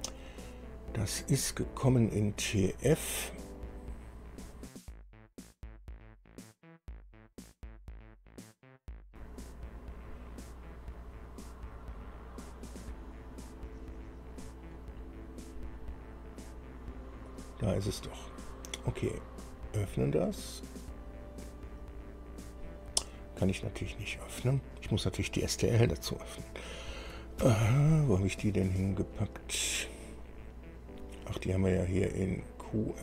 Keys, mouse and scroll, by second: 1.1-1.7 scroll up 4, 3.5 click, 17.4 click, 19.5 click, 27.5 ctrl+o, 30.4-31.6 scroll up 6.